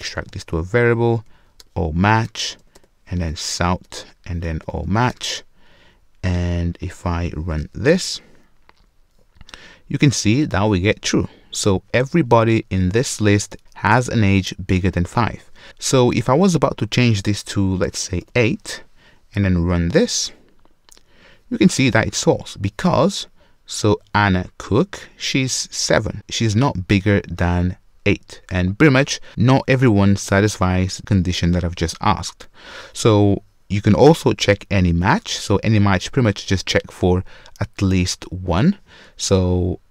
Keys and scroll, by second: 0.1 alt+super+v, 19.6 shift+F10.